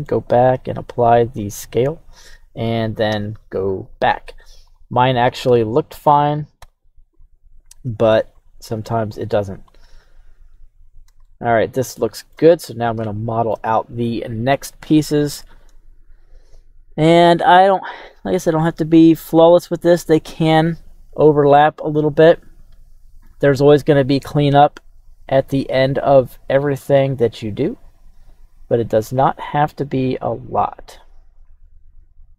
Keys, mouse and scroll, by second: 0.5 ctrl+a, 3.1 KP_3, 3.8 right click, 4.2 Tab, 4.7 right click, 5.4 Tab, 5.9 click, 6.6 q, 11.2-27.0 shift+middle drag, 27.9 click, 28.7 click, 31.9 click.